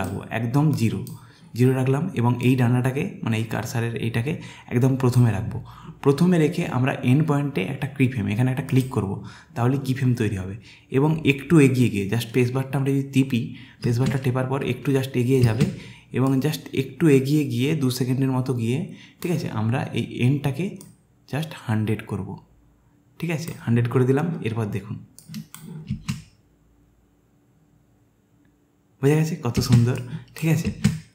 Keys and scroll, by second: 13.9 space, 26.0 space, 29.8 space.